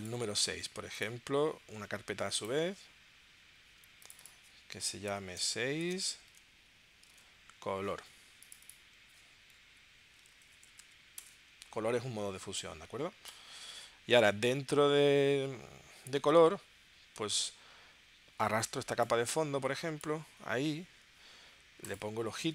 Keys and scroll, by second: 5.1 6, 5.4 space, 5.8 -, 5.9 space, 6.3 super+Tab, 7.1 super+Tab, 9.6 Right, 10.3-10.8 typing, 11.1 Return.